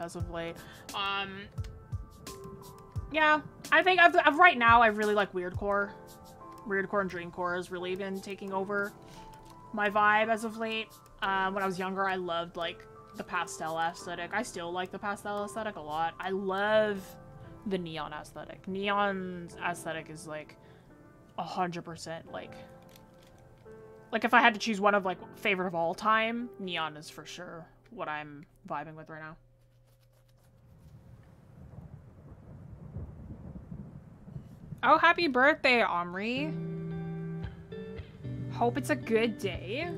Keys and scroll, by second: 2.6 ctrl+z.